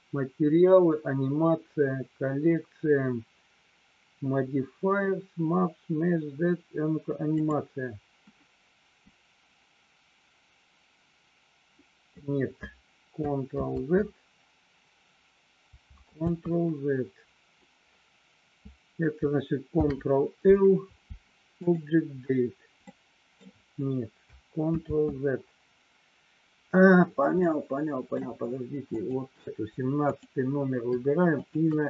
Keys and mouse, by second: 9.3-12.4 drag, 14.2 ctrl+z, 16.7 ctrl+z, 19.8 ctrl+l, 22.9 middle click, 25.5 ctrl+z, 27.5 middle click, 29.1 click, 31.5 shift+click.